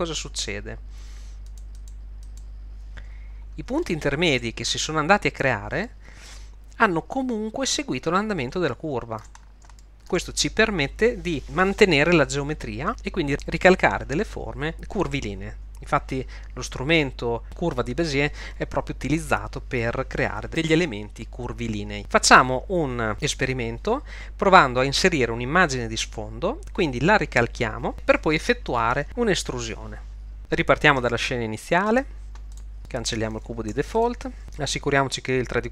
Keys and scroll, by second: 31.9 super+n, 33.7 x.